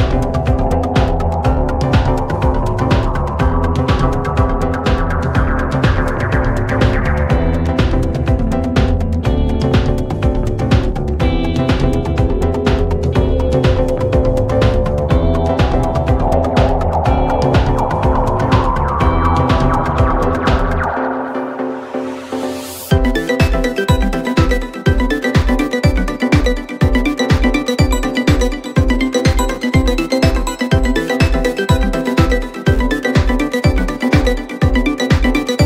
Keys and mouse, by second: 2.2 middle click, 5.5 middle click, 5.8 middle click, 9.9 middle click, 10.6 middle click, 15.8 middle click, 17.0 middle click, 17.3 middle click, 17.9 middle click, 18.8 middle click, 19.1 middle click, 19.7 middle click.